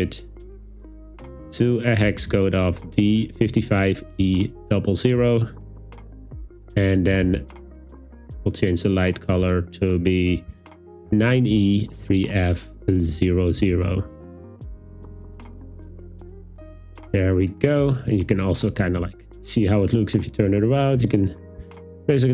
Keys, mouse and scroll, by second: 0.5 click, 8.6 click, 9.4 click, 18.8-21.1 drag, 21.7 super+z.